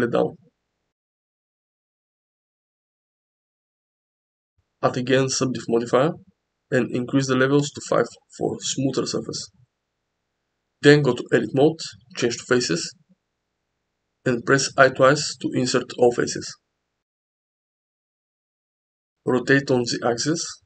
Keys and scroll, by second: 0.2 s, 1.4 s, 1.9 z, 10.8 Tab, 13.9 i, 14.1 i, 16.0 Tab, 16.5 s, 19.7 r.